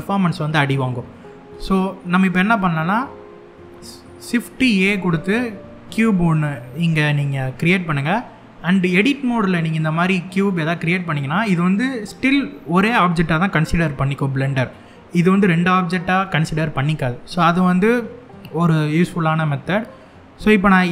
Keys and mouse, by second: 1.4 middle click, 4.1 shift+a, 10.5 middle click, 20.8 s.